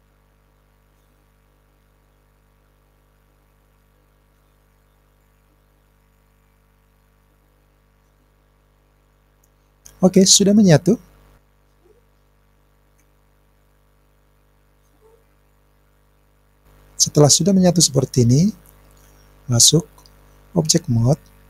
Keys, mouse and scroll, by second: 9.1 click, 11.8-12.3 scroll down 3, 12.4-15.0 scroll up 1, 19.0-20.6 drag.